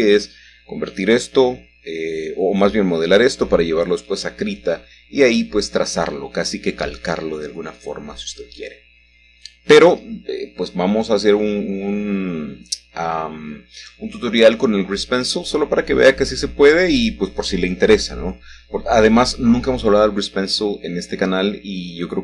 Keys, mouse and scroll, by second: 1.7 h, 4.4 middle click, 5.1-5.7 shift+scroll up 1, 5.7 shift+middle click, 6.7 middle click, 7.9 shift+middle click, 8.8 middle click, 9.1-10.8 scroll down 2, 11.8 shift+a, 13.7 Tab, 14.3 click, 14.9 Tab, 17.9 shift+a, 18.9 click, 20.5 g, 21.2 shift+z.